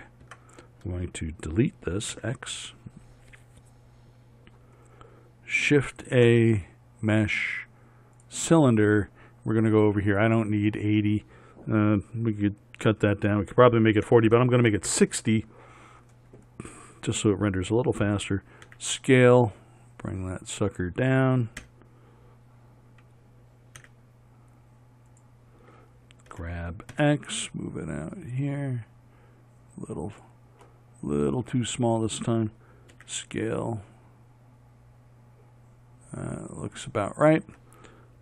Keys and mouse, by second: 0.3 Tab, 2.2 x, 6.1 shift+a, 11.1-15.0 drag, 18.7 s, 21.6 KP_7, 23.9 s, 26.4 g, 30.6-32.5 middle drag, 33.0 s.